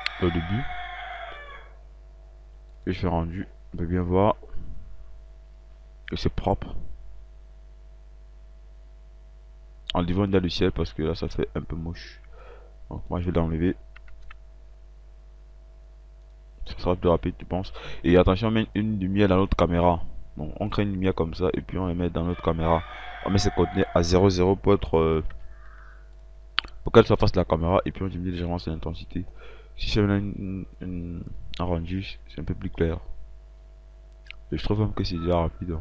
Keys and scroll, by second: 3.2 ctrl+r, 7.7 ctrl+r, 14.6 Delete, 25.2 a, 25.6 Tab, 26.0 a.